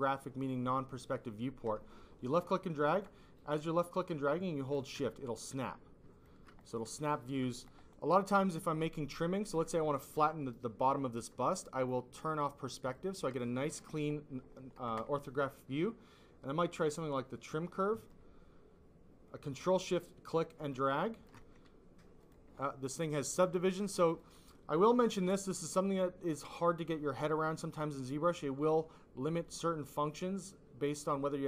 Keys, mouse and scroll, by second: 1.3 click, 3.3 click, 5.2 alt+click, 5.6 click, 7.2 alt+click, 9.6 click, 12.3 click, 12.8 click, 13.3 click, 16.7 click, 19.3 ctrl+click, 22.1 click, 22.5 click, 23.2 click, 23.5 click, 24.0 click.